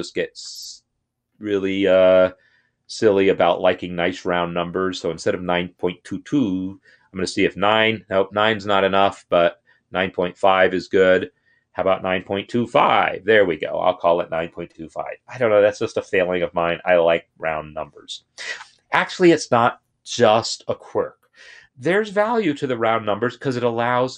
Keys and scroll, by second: 0.3 Left, 2.3 shift+Left, 3.0 shift+Left, 7.0 BackSpace, 8.9 Up, 10.6 Right, 11.2 shift+Left, 11.5 shift+Left, 11.9-12.2 typing.